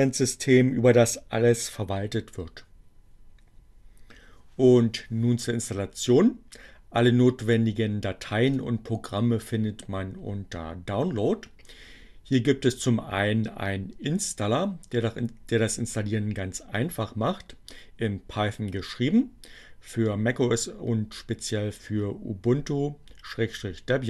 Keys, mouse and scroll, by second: 7.5-8.8 drag.